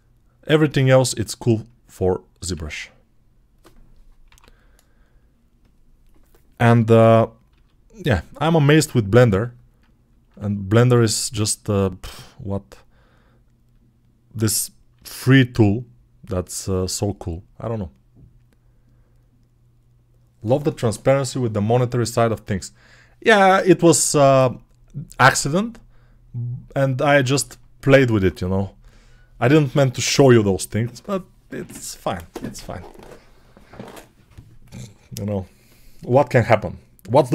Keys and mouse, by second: 0.8-8.6 drag, 2.4 ctrl+z, 4.1 l, 7.4 s, 8.6-10.5 middle drag, 9.1 g, 10.8-13.6 alt+shift+middle drag, 13.6-16.9 drag, 14.8 s, 16.9-37.3 middle drag.